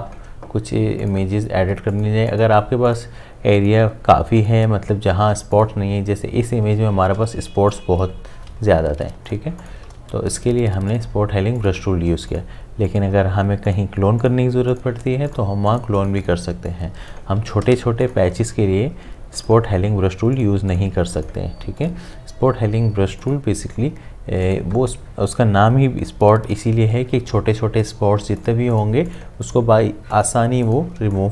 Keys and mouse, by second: 7.0 ctrl+z, 7.7 alt+click, 9.1 ctrl+space, 9.3 ctrl+click, 9.6 ctrl+space, 10.9 click, 16.5 space, 16.7 click, 17.1 space, 18.0 ctrl+alt+click, 31.0 space, 31.2 click.